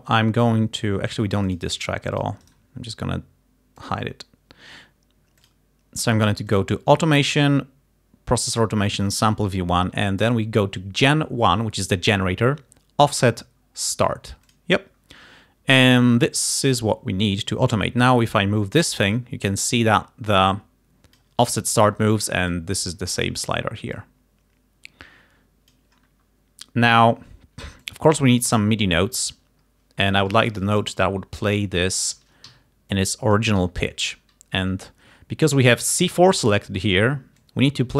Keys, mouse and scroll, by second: 1.5 click, 2.2 click, 2.5 right click, 3.9 click, 5.5 click, 6.6 click, 14.6 click, 16.1 click, 18.1-21.5 drag, 22.6 click, 24.0-26.0 drag, 27.9 click, 29.8-30.4 ctrl+scroll up 4, 31.0 scroll up 2, 31.8 click, 32.6 d, 33.0 click, 33.7 g, 34.0 click, 37.5-37.9 drag.